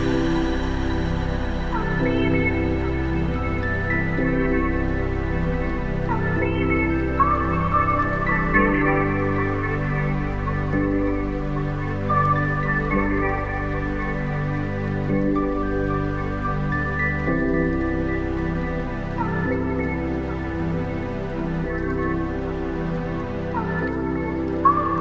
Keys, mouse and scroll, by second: 0.6-1.8 scroll down 2, 1.8 Tab, 2.2-3.7 right drag, 3.8-5.8 middle drag, 8.5 click, 9.3 click, 9.7 click, 9.9-12.8 drag, 15.1-16.9 drag, 17.9 KP_0, 20.5-23.1 scroll up 4, 23.1 drag, 23.7 click.